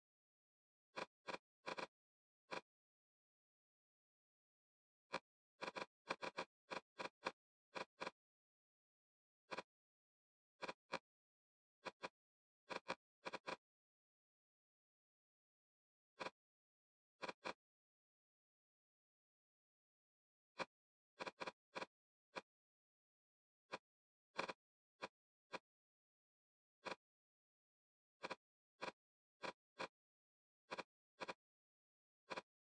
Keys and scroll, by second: 0.3 e, 8.2 2, 12.2 e, 19.0 8, 30.2 d, 32.6 Return.